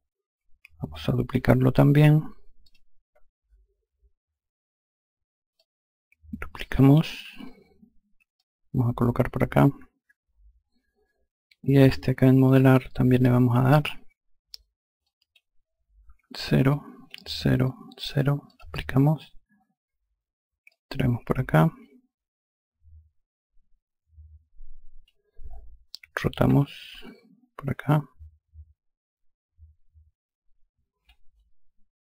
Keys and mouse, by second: 2.1 click, 5.1 ctrl+click, 7.9 click, 12.0 click, 14.6 click, 15.7 KP_0, 16.7 KP_0, 17.2 click, 17.6 KP_0, 18.0 click, 20.2 click, 26.0 r, 27.4 click, 30.6 shift+click.